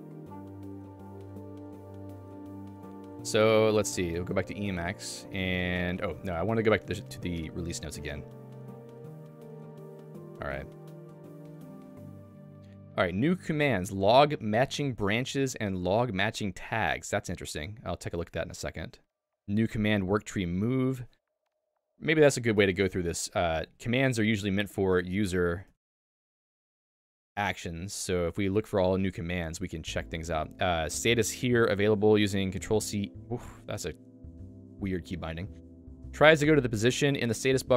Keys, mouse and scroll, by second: 4.6 Return, 7.3 click, 9.9 Return.